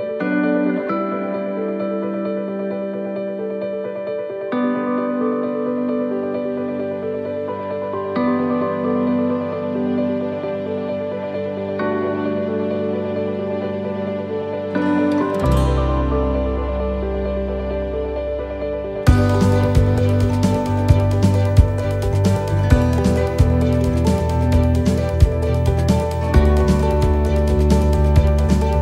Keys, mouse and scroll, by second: 4.2 click, 6.8 middle click, 7.7-8.1 scroll down 2, 8.1 middle click, 8.8 scroll up 2, 9.7 right click, 11.2 shift+right click, 12.3 click, 14.1 shift+middle click, 15.3 middle click, 16.2 right click, 16.7 shift+right click, 17.7 click, 20.1 middle click, 21.0-21.6 scroll down 4, 21.4 middle click, 22.1-22.6 scroll down 2, 22.6 shift+middle click, 23.3 middle click, 24.2 scroll up 2, 24.8 shift+middle click, 25.4 scroll down 2, 25.8 middle click, 27.1 right click, 27.9 l, 28.2 middle click.